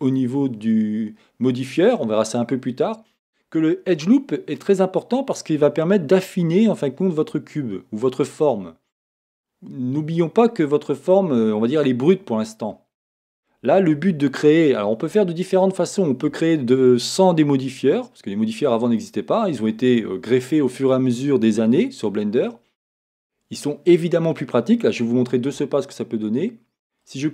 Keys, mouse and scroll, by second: 0.1 click, 1.5-12.6 drag, 12.6-18.3 middle drag, 14.0 Tab, 18.3-19.0 scroll down 1, 19.3-27.1 middle drag, 27.1-27.3 drag.